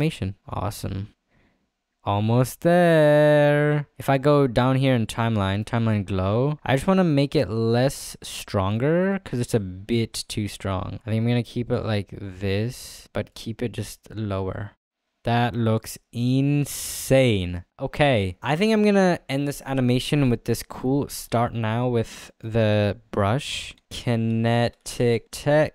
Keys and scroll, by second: 24.1-25.3 typing.